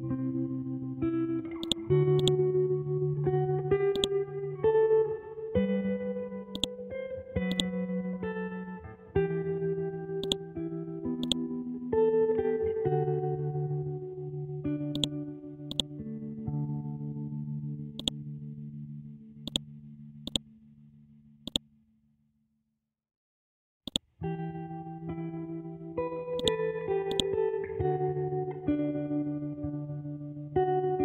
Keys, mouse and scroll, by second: 1.6 shift+click, 1.9 c, 2.2 click, 4.7 scroll down 1, 6.5-8.7 drag, 8.7 scroll up 1, 10.2 click, 13.6 Up, 14.9 shift+click, 15.4 c, 15.6 click, 18.0 click, 18.3 Down, 19.2 ctrl+z, 19.4 ctrl+click, 22.5 Down, 23.8 click, 24.1 scroll down 1, 26.4-28.5 drag, 28.5 scroll up 1.